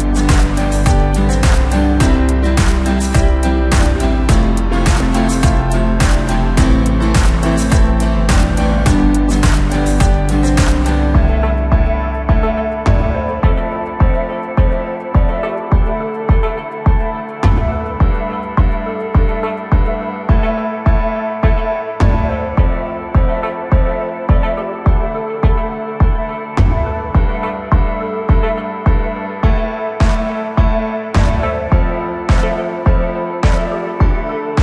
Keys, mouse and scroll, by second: 1.1 1, 4.1 click, 6.8 shift+click, 9.2 s, 11.9 g, 16.0-18.7 scroll up 1, 18.7 click, 20.9 shift+click, 22.3 s, 31.8 click, 32.2-32.7 scroll down 2, 32.7-33.2 scroll up 2, 33.2-34.6 middle drag.